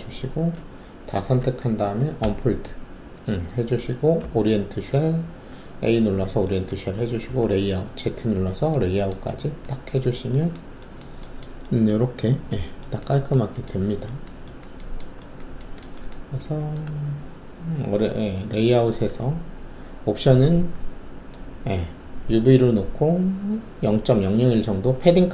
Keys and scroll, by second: 2.2 d, 4.2 a, 7.2 alt+z.